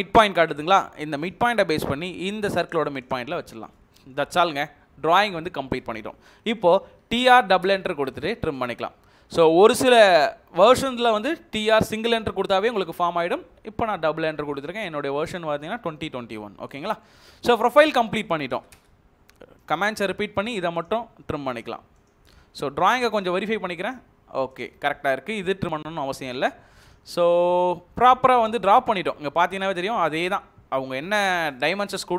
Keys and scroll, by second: 6.6-7.6 typing, 16.3 Escape, 18.5 space, 18.7 space, 28.8 Escape.